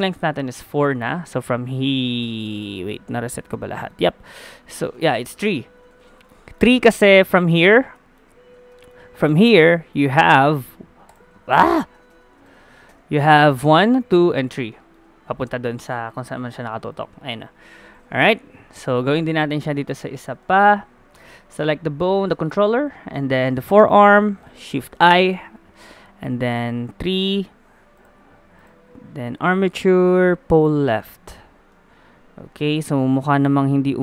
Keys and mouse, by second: 3.1 middle click, 5.0 a, 5.1 a, 5.7 alt+g, 6.0 alt+r, 6.0 alt+s, 6.7 a, 11.3 ctrl+z, 11.9 a, 12.1 a, 12.4 alt+g, 12.6 alt+r, 12.6 alt+s, 12.9 a, 13.6-16.4 drag, 16.4-18.4 middle drag, 18.4 KP_1, 20.2 middle click, 24.8 shift+i, 26.4-31.7 drag, 31.7-33.6 middle drag.